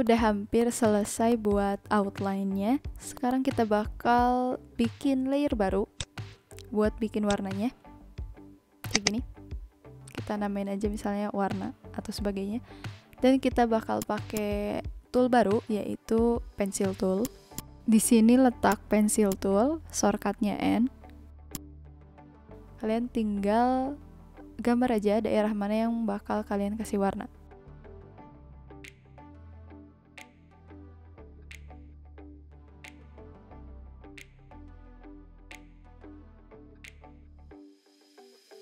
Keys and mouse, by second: 0.0 click, 0.4 ctrl+z, 0.6 click, 0.9 v, 1.0 alt+click, 1.3 click, 3.1 click, 5.8 click, 8.9 click, 9.8 w, 10.0 a, 13.9 click, 17.2 click, 18.6 click, 21.5 click.